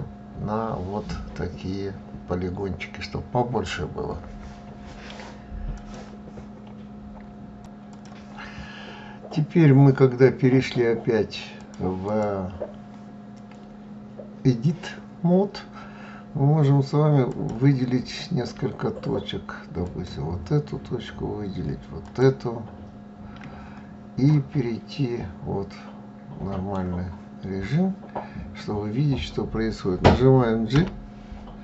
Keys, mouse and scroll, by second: 11.1 click, 11.5 click, 16.8 click, 19.3 shift+click, 21.5 shift+click, 23.7-26.8 middle drag, 30.2 g.